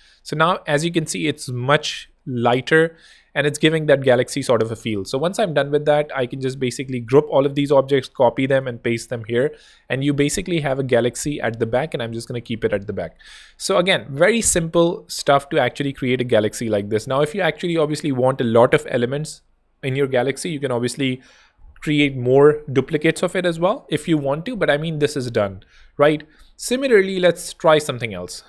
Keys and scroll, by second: 0.4 Escape, 1.1 super+Escape, 6.2 Return, 6.7 super+g, 8.7 super+v, 10.4 super+[, 12.0 super+z, 15.1 super+x, 26.6 alt+z, 27.7 super+d.